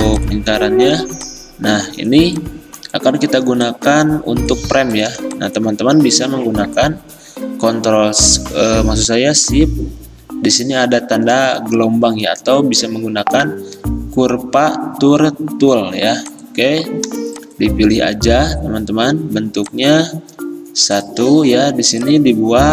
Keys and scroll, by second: 11.1 `.